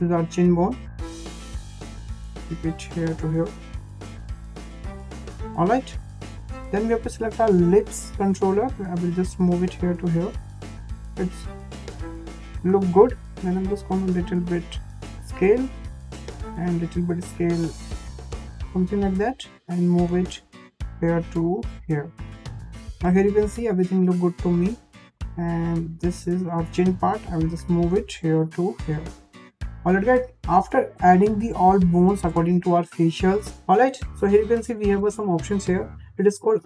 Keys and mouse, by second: 0.3 click, 1.0 click, 1.1 click, 2.6 click, 3.3 click, 3.5 click, 4.9 click, 5.0 click, 5.7 shift+middle click, 6.8 click, 7.7 l, 8.4-11.0 drag, 12.7 s, 16.7 s, 19.9 click, 20.0-22.8 drag, 25.1 click, 25.9 click, 26.0 click, 27.3 click, 27.8 click, 27.9 click, 32.9 shift+middle click.